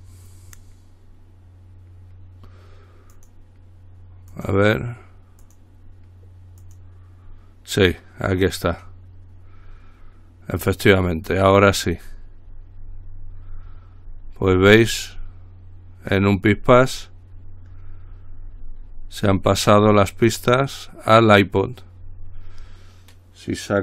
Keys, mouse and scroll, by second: 3.3 click, 4.5 click, 5.7 click, 6.8 click, 9.8-10.4 scroll down 2, 10.7-11.3 scroll down 2, 11.3-11.9 scroll down 2, 11.9-16.0 scroll down 1, 16.3-18.9 scroll up 2, 18.9-21.0 scroll up 1.